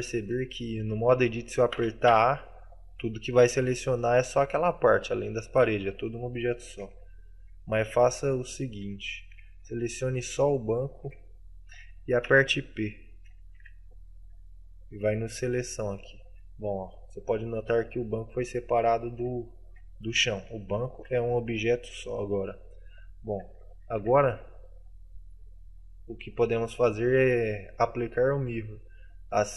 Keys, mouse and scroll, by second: 16.2 Tab, 16.7 right click, 18.2 right click, 19.1 right click, 19.9 right click.